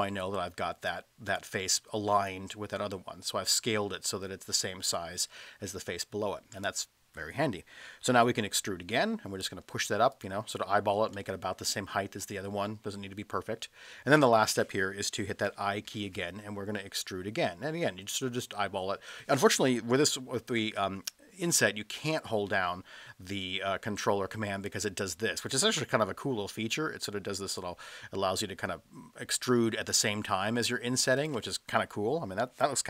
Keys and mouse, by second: 3.7 middle click, 5.7-6.3 middle drag, 7.9 middle click, 8.6 e, 10.1 click, 10.6-11.1 middle drag, 12.7-13.4 middle drag, 13.9-14.3 middle drag, 15.9 i, 31.1 ctrl+click.